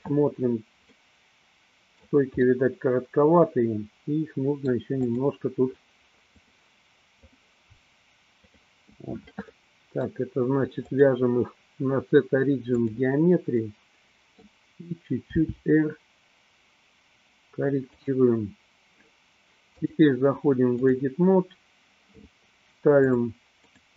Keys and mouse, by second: 1.1-2.3 middle drag, 2.8-4.8 middle drag, 5.3 click, 6.6 click, 8.6 click, 9.7 middle click, 11.1-13.2 drag, 13.8 middle click, 15.6 r, 19.8-21.1 drag, 23.8 click.